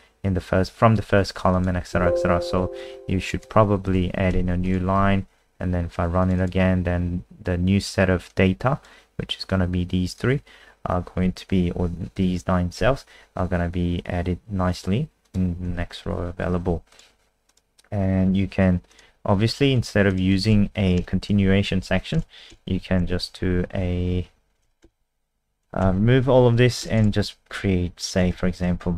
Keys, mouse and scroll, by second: 1.0 Escape, 1.5 click, 1.9 ctrl+w, 2.5 n, 3.2 click, 3.9 Return, 4.3 ctrl+s, 4.7 Return, 4.7 ctrl+s, 4.7 click, 5.0 F5, 6.2 click, 6.4 click, 8.3 click, 15.7 ctrl+w, 16.9 click, 17.8 scroll down 2, 18.9 click, 20.1 click, 20.6 Down, 21.0 BackSpace, 21.4 Left, 21.8 Down, 22.2 BackSpace, 22.5 Down, 22.5 BackSpace, 22.7 Left, 23.2 shift+End, 25.9 shift+Home, 26.1 ctrl+shift+Right, 26.8 BackSpace, 28.0-28.9 typing.